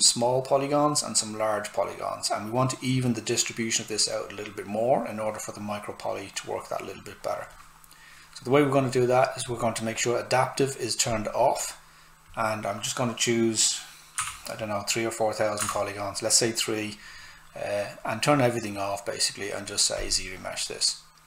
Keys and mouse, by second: 8.8 click, 14.2 3, 15.6 Tab, 20.0 click.